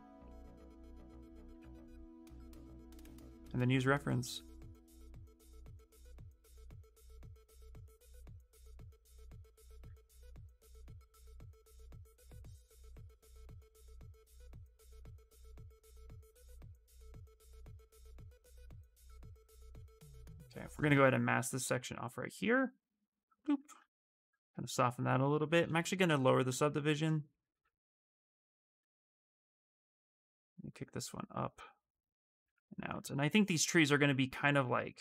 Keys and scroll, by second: 0.5-2.0 typing, 25.4-26.6 typing.